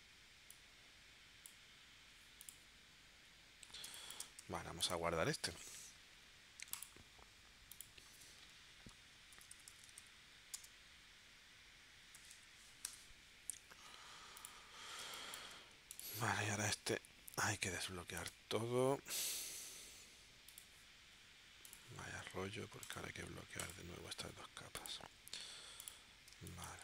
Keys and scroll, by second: 3.9 space, 4.4 v, 9.3-10.5 typing, 12.1 0, 12.8 Return, 15.0 space, 26.4 space.